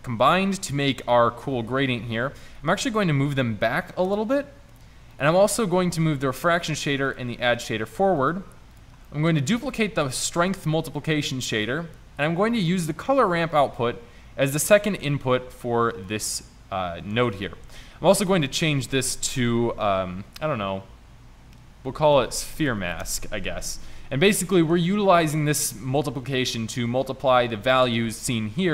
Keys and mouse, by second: 2.6 g, 5.8 g, 8.3 g, 9.7 shift+d, 17.8 n, 18.6 n.